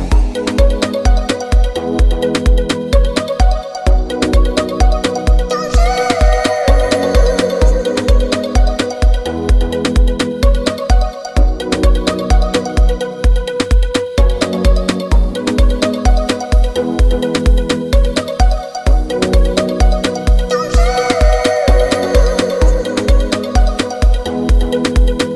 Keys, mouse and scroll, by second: 9.9 ctrl+z, 12.6-24.9 drag.